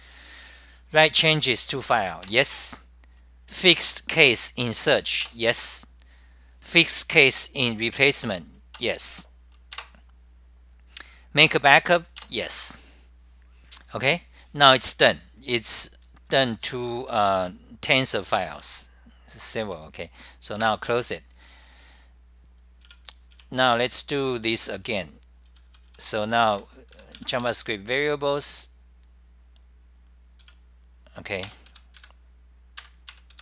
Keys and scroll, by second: 0.5 Delete, 0.5 F10, 1.6-3.7 typing, 6.0-6.7 typing, 8.9-10.2 typing, 12.9-15.3 typing, 16.4 Right, 16.6 Right, 16.8 Right, 17.0 Right, 17.2 Right, 17.4-18.4 Right, 18.6-19.8 Left, 19.6 Return, 20.8 w, 22.5-23.3 typing, 25.5-28.0 typing, 30.6-31.8 typing, 31.9 F10, 32.1 Up, 32.9 ctrl+g.